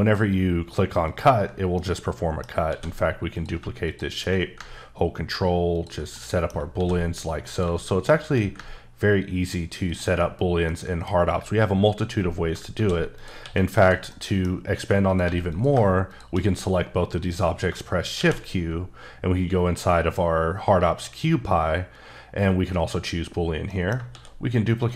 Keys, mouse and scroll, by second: 1.1 ctrl+click, 1.7 middle click, 2.6 shift+d, 3.3 click, 6.1 middle click, 6.7 shift+d, 7.5 click, 9.8 ctrl+click, 10.6 middle click, 12.7 shift+d, 13.1 click, 13.4 s, 13.8 click, 14.1 middle click, 14.5 scroll up 3, 14.7 s, 15.1 click, 15.2 g, 15.5 click, 18.1 shift+q, 22.7 click, 23.8 middle click, 24.1 shift+d, 24.8 click.